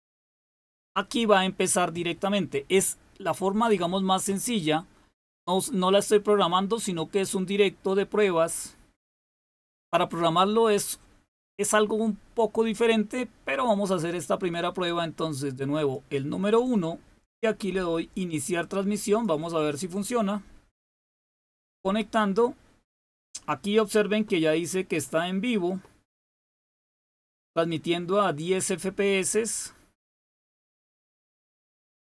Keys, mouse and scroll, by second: 15.7 click, 19.1 click.